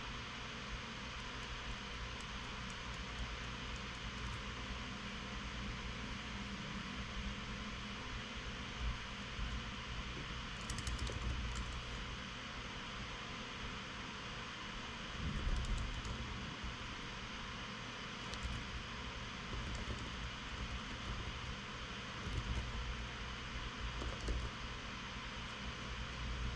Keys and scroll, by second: 9.6-12.5 typing, 13.5 typing, 15.5-18.0 typing, 19.0 alt+BackSpace, 19.9-25.5 typing.